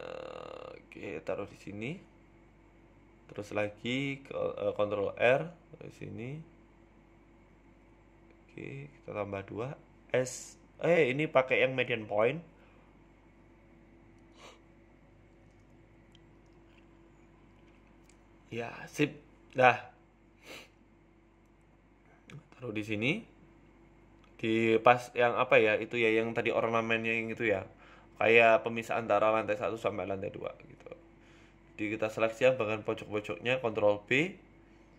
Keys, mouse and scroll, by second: 1.0 s, 1.9 g, 3.3 scroll up 3, 3.5 shift+middle click, 4.6 ctrl+r, 4.6 Tab, 5.3 ctrl+r, 9.6 ctrl+r, 10.6 z, 11.1 s, 13.2 click, 13.5 s, 18.1 middle click, 19.3 KP_1, 19.5 Tab, 20.0 KP_7, 20.7 shift+middle click, 21.2 s, 23.7 g, 25.1 s, 26.2 f, 26.7 ctrl+z, 27.6 g, 29.0 KP_1, 29.3 scroll up 1, 29.6 shift+middle click, 29.7 Tab, 30.4 click, 30.9 middle click, 31.2 KP_7, 31.8 click, 32.4 shift+click, 34.0 KP_1, 34.8 ctrl+b.